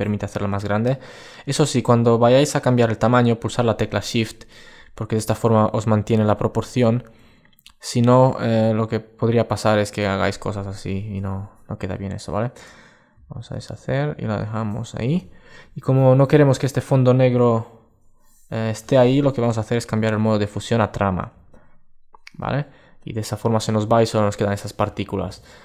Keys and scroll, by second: 12.9 super+z, 25.0 super+1.